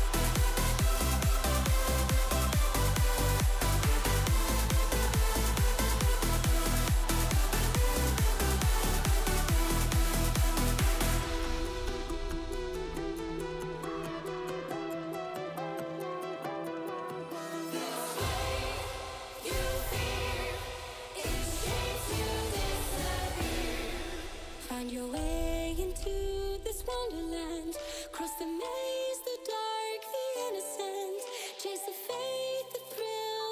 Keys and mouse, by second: 0.8 e, 4.3 a, 4.9 shift+n, 5.5 KP_3, 6.4 g, 8.9 Tab, 9.2-9.5 middle drag, 10.5 Tab, 11.3 middle click, 13.3 a, 13.7 click, 14.4 click, 15.6 click, 16.6 e, 18.6 a, 19.0 shift+n, 19.7 KP_3, 20.5 g, 22.6 z, 24.5 click, 24.9 z, 26.3 shift+middle click, 27.1 g, 29.4 s, 30.8 z, 31.5 click, 32.2 z, 32.7 click, 33.0 3.